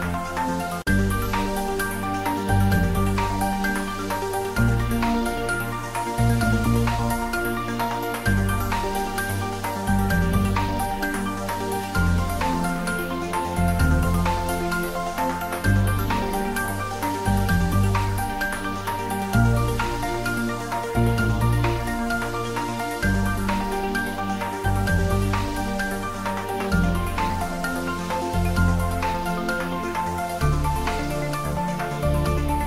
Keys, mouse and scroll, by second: 0.1 click, 1.0 shift+click, 1.3-2.5 shift+middle drag, 2.5 shift+click, 3.4 shift+click, 5.7 shift+click, 6.6 click, 7.2 shift+middle click, 8.1-8.9 typing, 9.2 click, 9.4 ctrl+z, 10.0 click, 10.4 ctrl+z, 11.2 r, 11.7 click, 11.8 click, 12.1 g, 12.7 click, 12.9 s, 14.0 click, 15.8 g, 17.4-18.8 typing, 17.4 click, 19.2 click, 19.4 ctrl+middle click, 20.2 s, 20.8 click, 22.8 shift+middle click, 23.1 middle click, 23.9 click, 24.3 shift+middle click, 24.9 ctrl+middle click, 25.3 shift+middle click, 25.9 g, 26.9 click, 27.2 s, 28.0 click, 28.3 g, 30.0 click, 30.8 r, 32.4 click.